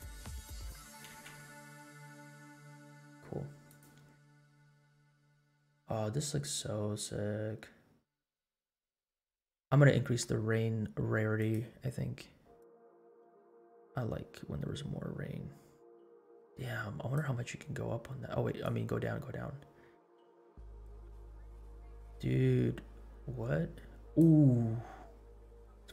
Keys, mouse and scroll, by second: 1.2 space, 3.7 click, 4.8 scroll up 1, 5.8 scroll up 1, 9.5 space, 11.4 click, 12.6-17.3 drag, 18.6-24.4 drag, 24.5 scroll down 2, 25.2 scroll up 2, 25.7 space.